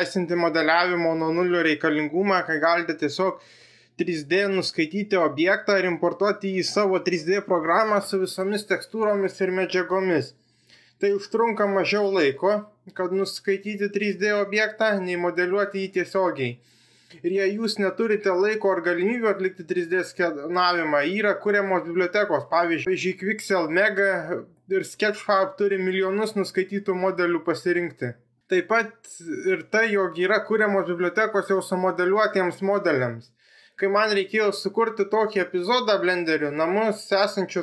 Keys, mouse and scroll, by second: 3.1 click.